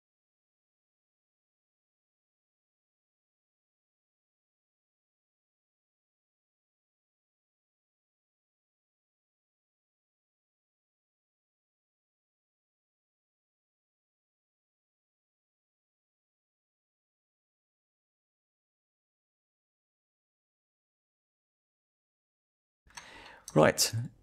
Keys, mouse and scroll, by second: 0.2 click, 0.4 shift+middle click, 0.7 1, 0.9 click, 1.0 shift+middle click, 1.6 click, 1.9 shift+click, 2.2 j, 2.4 click, 3.0 g, 4.1 click, 4.8 click, 5.0 shift+click, 5.4 j, 5.5 click, 5.9 click, 6.0 shift+click, 6.2 j, 6.3 click, 6.9 j, 7.0 click, 7.1 scroll down 2, 7.3 shift+middle click, 7.5-8.1 scroll up 2, 7.8 shift+middle click, 8.2 click, 8.5 click, 8.6 shift+middle click, 8.7 scroll down 1, 8.8 shift+middle click, 9.0 click, 9.1-9.4 scroll up 3, 9.2 shift+middle click, 9.4 click, 9.7 click, 9.9 shift+click, 10.1 shift+click, 10.5 Delete, 10.8 click, 11.0 click, 11.3 1, 11.9 scroll down 1, 12.5 click, 12.9 shift+click, 14.0 shift+click, 14.9 j, 15.0 click, 15.1 click, 15.3 shift+click, 15.6 j, 15.6 click, 15.8 click, 15.9 shift+click, 16.1 j, 16.2 click, 16.4 click, 16.5 shift+click, 16.8 j, 16.9 click, 17.0 scroll down 2, 17.1 shift+middle click, 17.3 scroll up 2, 17.5-18.0 scroll down 2, 17.6 shift+middle click, 18.3 click, 19.0 g, 19.8 click, 20.1 click, 20.3 g, 20.8 click, 21.9 click, 22.6 scroll up 1, 22.9 shift+middle click, 23.1 click, 23.5 Tab, 24.0 click.